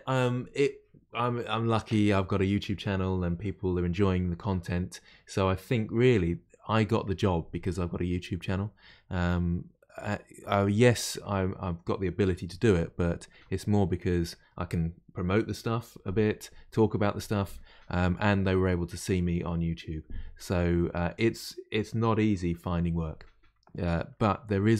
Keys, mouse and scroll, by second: 10.1-13.1 middle drag.